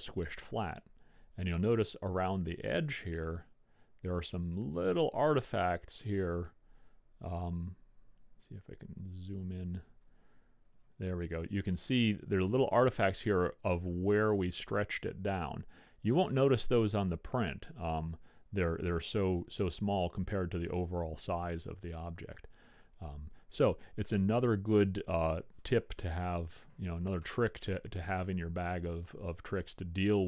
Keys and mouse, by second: 6.8-13.2 middle drag, 20.4-23.4 middle drag, 24.5 Tab, 27.4-29.3 middle drag.